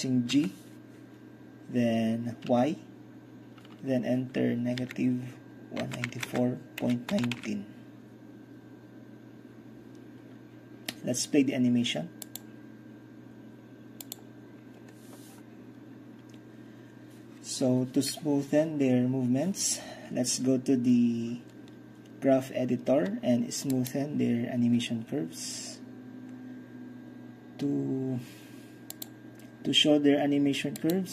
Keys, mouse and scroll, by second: 0.3 g, 2.5 y, 4.8 -, 5.9-7.6 typing, 12.3-13.9 drag, 14.1-15.4 drag, 23.8-24.9 drag, 29.0 click.